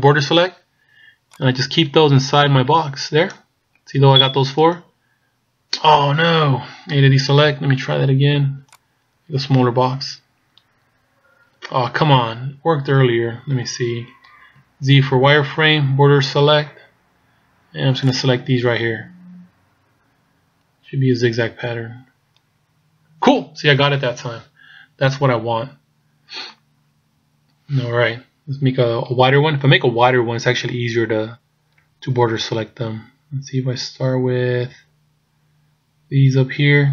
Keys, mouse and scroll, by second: 7.0 a, 7.5 b, 12.4 a, 13.1 scroll down 2, 14.6 z, 15.8 b, 24.0-26.2 scroll down 1, 26.2-27.4 scroll down 2, 28.1-31.3 scroll up 1, 31.8 b.